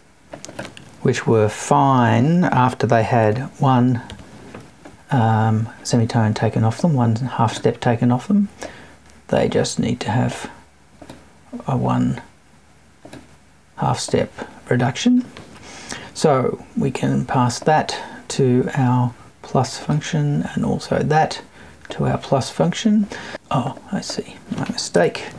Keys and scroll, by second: 24.9 BackSpace.